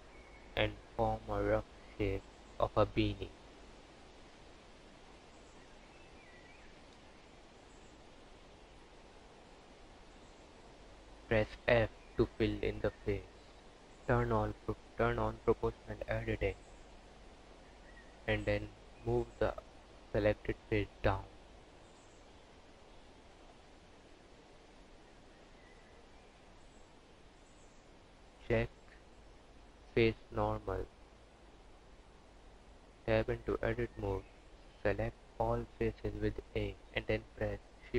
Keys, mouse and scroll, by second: 0.2 s, 2.3 s, 2.9 e, 4.1 s, 6.2 s, 7.8 g, 11.2 f, 12.9 click, 14.6 g, 19.0 Tab, 19.3 click, 20.0 click, 25.0 z, 26.4 click, 27.9 click, 31.6 Tab, 33.6 a, 35.9 ctrl+shift+n.